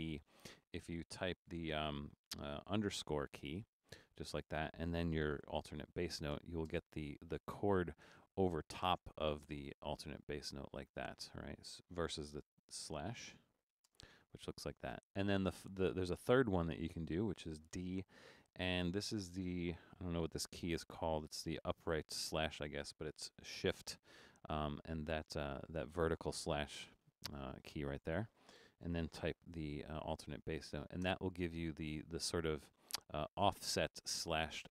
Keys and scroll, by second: 3.1 shift+-, 6.7 space, 12.4-13.8 typing, 17.7 typing, 25.8 typing, 28.9-31.0 typing.